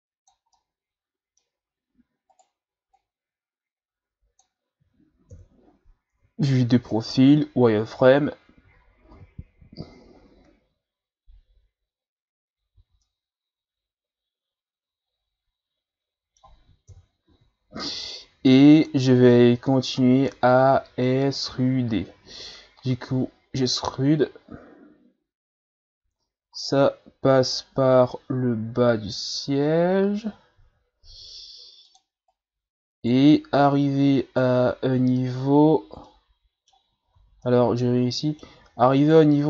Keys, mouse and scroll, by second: 0.5-1.6 middle drag, 1.6-2.3 scroll up 2, 2.3 right click, 2.9-5.3 drag, 5.3 KP_3, 7.1 z, 8.0-8.5 ctrl+scroll down 2, 8.8-9.6 shift+scroll down 4, 9.6-10.0 ctrl+scroll down 1, 12.8 z, 13.0-16.0 middle drag, 16.8 KP_3, 17.3 z, 20.3-23.1 middle drag, 23.1 e, 32.3 right click, 33.7 right click, 36.1-37.2 middle drag, 37.2 z, 37.5-39.0 middle drag, 39.0 right click.